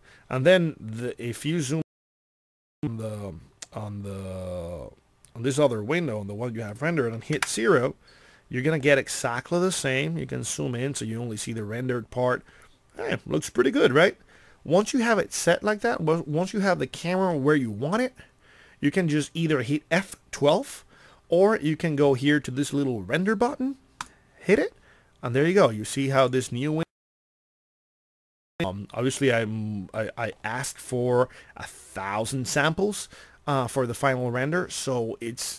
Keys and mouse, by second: 1.3-2.4 drag, 7.4 KP_0, 24.9 middle click, 27.8 middle click.